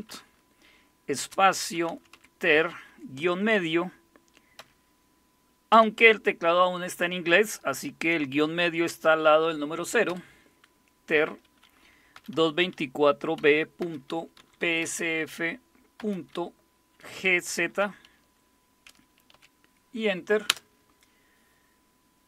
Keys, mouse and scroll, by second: 0.0-2.6 typing, 4.6 typing, 5.7 typing, 11.9-16.0 typing, 17.1-17.8 typing, 19.3 typing, 20.5 Return.